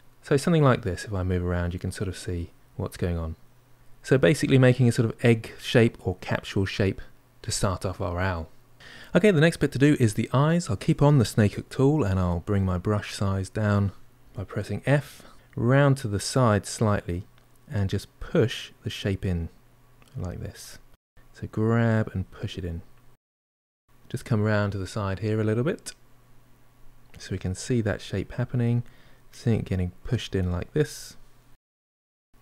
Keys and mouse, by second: 4.0-7.0 middle drag, 14.1 click, 14.1 f, 15.3-16.9 middle drag, 17.8-20.3 drag, 20.4-22.4 drag, 22.4 middle click, 23.3-30.6 drag, 30.6-32.1 middle drag, 32.1-32.4 drag.